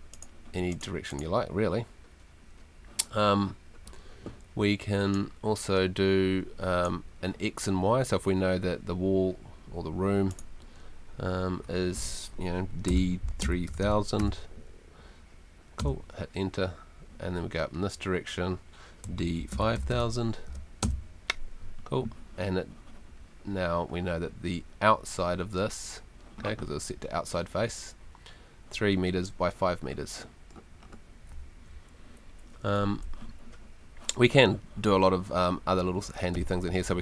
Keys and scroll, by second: 12.9-14.1 typing, 15.8 Return, 18.8-20.2 typing, 20.8 Return, 31.5 Escape.